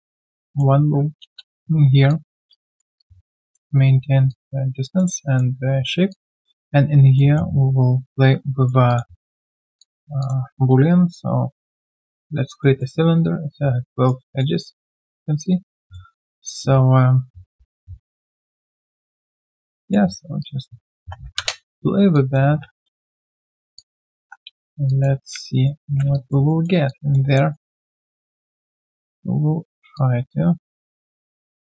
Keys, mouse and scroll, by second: 1.2 middle click, 1.7 Return, 2.1 alt+click, 2.5 right click, 3.0 alt+click, 4.3 alt+click, 5.2 alt+middle click, 6.1 alt+click, 6.5 alt+middle click, 8.3 right click, 9.6 q, 9.8 alt+click, 10.9 shift+right click, 12.6 alt+middle click, 13.5 alt+middle click, 14.2 alt+middle click, 14.6 w, 15.8 w, 15.9 alt+middle click, 16.7 alt+middle click, 17.2 ctrl+a, 20.6-23.1 typing, 22.1 alt+click, 23.7 alt+click, 24.9-26.5 typing, 25.6 middle click, 26.1 alt+click, 26.5 alt+middle click, 26.8 alt+click, 27.2 alt+right click, 27.5 alt+middle click, 27.8 alt+click, 29.8 r, 29.9 alt+click, 31.1 e.